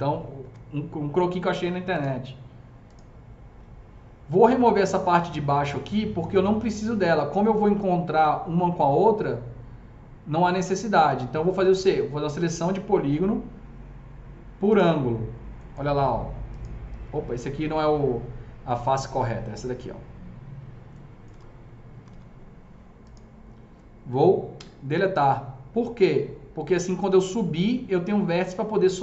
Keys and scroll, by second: 0.5 F3, 1.9 F3, 21.4 F3, 21.9 F3, 22.0 F4, 24.6 Delete.